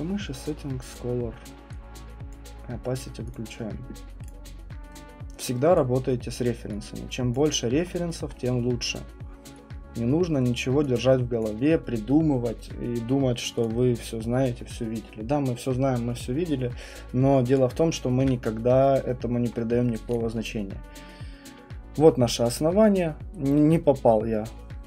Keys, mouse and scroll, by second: 0.9 click, 2.3 click, 3.3 click, 4.3 click, 5.7 right click, 7.8-8.3 scroll, 8.5 middle click, 8.5 scroll, 10.5 click, 11.4 click, 13.7 click, 14.0 click, 17.5 click, 18.2 Delete, 20.1 click.